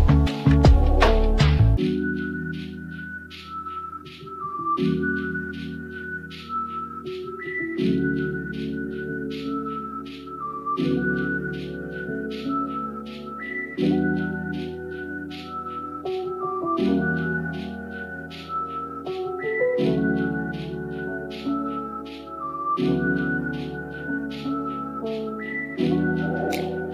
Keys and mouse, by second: 0.2 click, 1.0 middle click, 4.0 shift+middle click, 5.3 middle click, 6.7 click, 7.7 click, 9.1 x, 10.9 middle click, 14.2 ctrl+z, 15.2 click, 17.0 x, 20.0 shift+middle click, 23.1 alt+g, 24.3 middle click, 24.9 Tab.